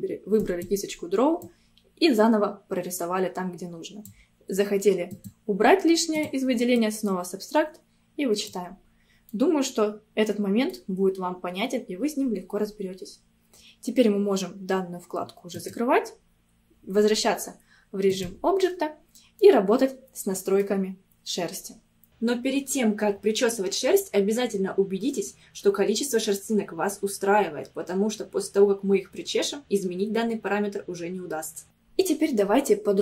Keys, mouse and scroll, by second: 1.5-4.5 drag, 5.1-8.9 drag, 8.9 scroll down 1, 9.4-12.5 middle drag, 15.6-18.6 drag, 19.4-21.6 middle drag, 21.6-22.1 scroll up 2, 22.1 F6, 31.6 scroll up 2.